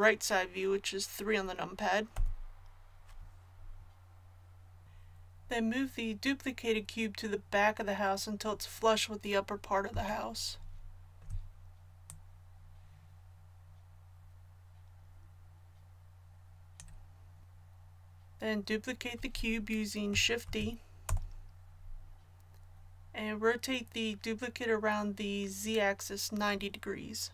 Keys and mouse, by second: 2.1 KP_3, 10.5-20.4 drag, 20.4 shift+d.